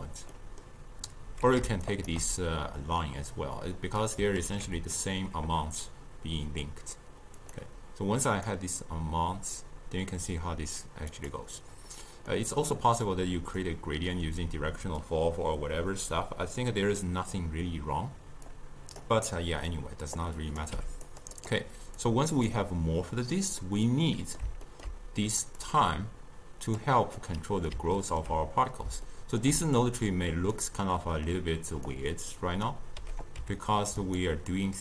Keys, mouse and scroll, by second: 0.4-1.9 middle drag, 1.9 shift+right click, 4.1 click, 4.4 ctrl+x, 7.4-12.4 drag, 12.4-13.2 middle drag, 13.2 click, 18.5 click, 19.3-20.2 middle drag, 20.2 click, 20.8 g, 21.4 drag, 22.1 click, 23.7-25.7 middle drag, 25.7 drag, 27.3-30.1 middle drag, 30.1 click, 30.9-32.0 middle drag, 32.0-33.4 drag, 33.4 g.